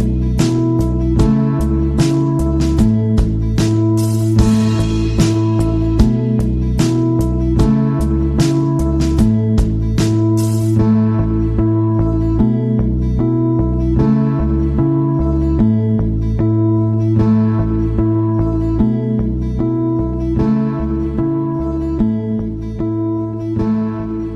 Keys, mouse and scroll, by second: 0.3 click, 2.3 click, 3.8 click, 5.0 click, 6.1 click, 9.1 click, 9.9 click, 17.1 click, 17.9 click, 18.4 click, 21.1 click, 22.9 click.